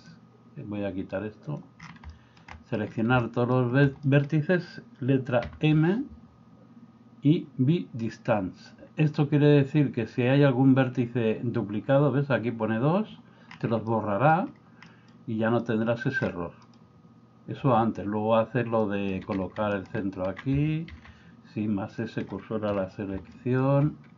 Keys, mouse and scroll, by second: 0.0-1.8 drag, 2.1 shift+middle click, 2.6 middle click, 4.0 middle click, 13.8 middle click, 14.9 middle click, 15.6 middle click, 16.6 middle click, 18.8 middle click, 20.9 shift+s, 22.7 KP_1, 23.4 middle click.